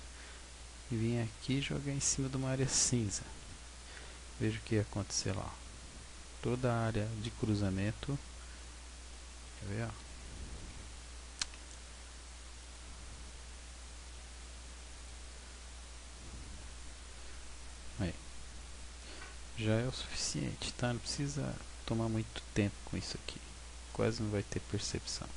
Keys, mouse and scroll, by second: 0.4-0.7 scroll down 3, 1.4 g, 2.5 click, 3.5 Tab, 4.0-5.2 scroll up 12, 6.3-6.9 scroll down 4, 9.4 z, 10.0 z, 10.7 z, 12.6 click, 16.1-16.6 scroll down 1, 16.6-17.4 scroll down 1, 16.6 a, 17.4-18.0 scroll down 2, 18.0 shift+middle click, 19.2-19.6 scroll up 6, 23.0-23.9 scroll down 1, 23.9 middle click, 23.9 scroll down 3.